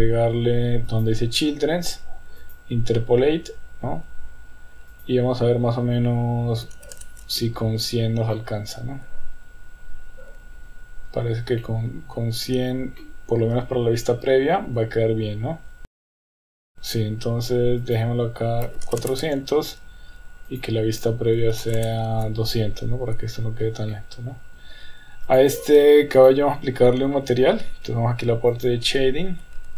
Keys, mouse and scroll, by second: 0.9 click, 2.4 click, 4.9-7.9 drag, 6.9 KP_0, 8.3-10.7 middle drag, 11.6-12.2 middle drag, 13.0-14.5 middle drag, 15.8 click, 16.1 click, 17.9-19.9 drag, 19.0 KP_0, 20.5-22.8 drag, 22.7 KP_0, 23.9-24.4 middle drag, 26.2 click, 27.4 ctrl+s.